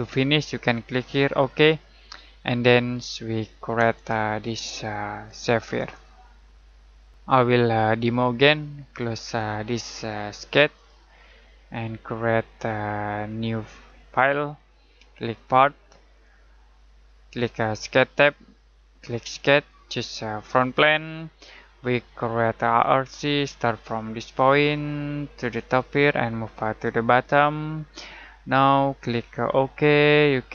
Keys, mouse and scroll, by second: 1.5 click, 4.2 middle click, 5.8 click, 9.2 click.